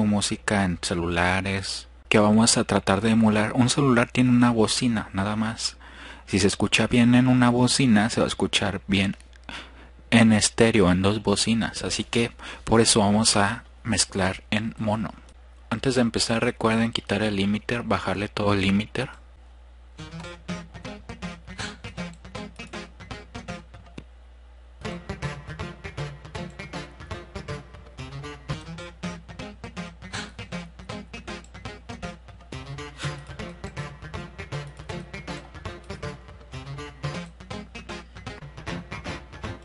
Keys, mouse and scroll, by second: 15.8 drag, 16.6-17.8 drag, 18.0-18.4 drag, 21.3 click, 25.4 click, 38.0 click.